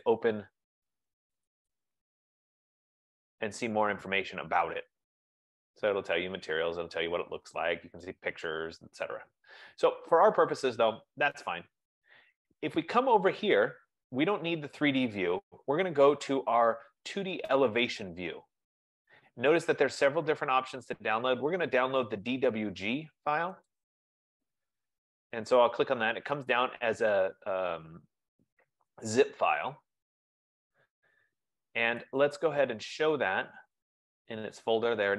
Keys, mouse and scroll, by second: 0.1 click, 1.6 click, 4.9 scroll, 5.5-6.0 scroll, 6.3-6.9 scroll, 7.7-8.8 scroll, 8.8 scroll, 9.4-10.0 scroll, 10.9 click, 23.9 click, 32.4 click, 34.0 click.